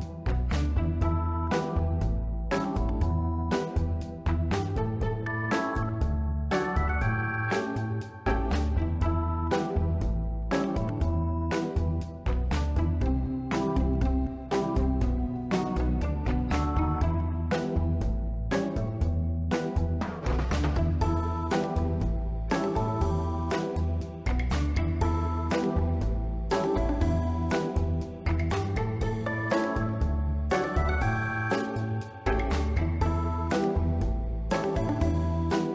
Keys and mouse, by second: 0.9 click, 2.6 shift+d, 2.6 shift+Return, 3.7 click, 5.1 click, 6.5 click, 8.5 click, 10.3 click, 11.6 click, 12.5 click, 16.2-16.6 middle drag, 16.9 ctrl+middle click, 17.1-17.5 middle drag, 20.4 ctrl+m, 21.2 z, 21.9 Return, 23.5 middle drag, 24.3-25.4 drag, 26.2 r, 26.4 z, 27.1 click, 27.4 middle click, 28.0 click, 28.8 middle click, 29.2 Tab, 29.5 1, 29.6 click, 29.8 b, 30.5 b, 31.5-32.9 drag, 33.3 Tab, 33.5 middle click, 34.0 s, 34.5 click, 34.6 middle drag, 35.5 r.